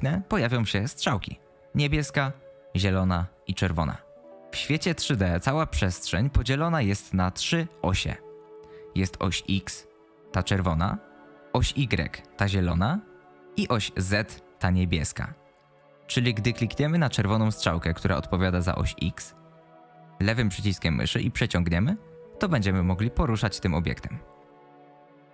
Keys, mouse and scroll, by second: 20.0-25.1 drag.